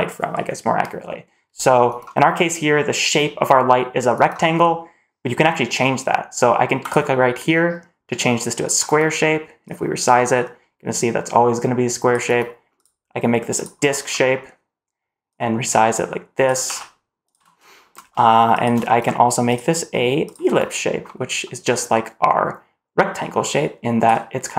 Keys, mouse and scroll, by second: 2.2-2.6 middle drag, 6.7-8.7 drag, 9.6-12.0 drag, 12.7-13.6 drag, 14.0 middle click, 15.2 click, 16.6 g, 17.6 shift+middle drag, 17.8 scroll up 1, 18.5 shift+click, 19.4-20.2 drag, 21.0 middle drag, 23.0 click.